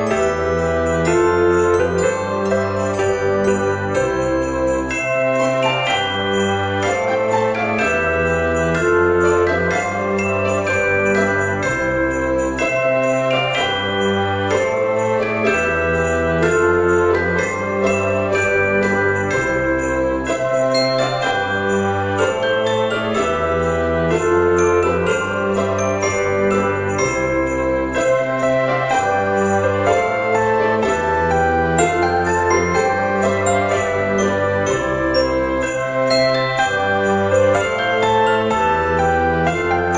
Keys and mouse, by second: 1.7 middle click, 2.1 s, 3.2 click, 3.6 right click, 3.9 click, 4.9 shift+click, 5.7 s, 6.7 click, 7.7 g, 9.7 click, 10.1 middle click, 11.1 KP_7, 12.2 shift+middle click, 12.6 g, 13.0 y, 13.9 click, 17.4 click, 18.8 click, 21.6 ctrl+a, 22.3 Tab, 22.9 a, 23.5 shift+d, 23.8 r, 27.7 click, 29.7 shift+d, 30.5 r, 32.1 click, 33.2 shift+d, 33.6 r, 35.3 click, 35.7 Tab, 36.1 middle click, 37.2 click, 37.9 x, 38.0 click, 39.3 middle click, 39.7 Tab.